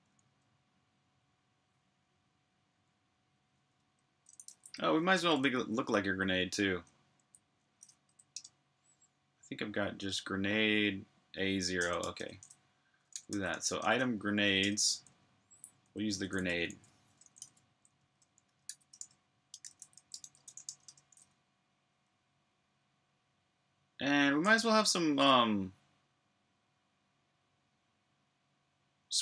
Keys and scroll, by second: 0.0-0.6 typing, 0.1 super+h, 0.7 super+h, 4.2-5.4 typing, 8.1 typing, 11.7-15.6 typing, 19.5 typing, 24.1 j.